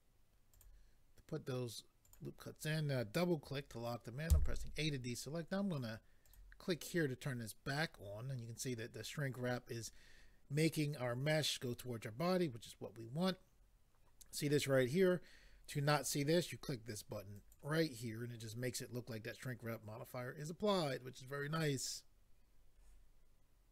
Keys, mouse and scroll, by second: 0.5 click, 2.0 click, 4.3 a, 6.2 click, 17.4 click.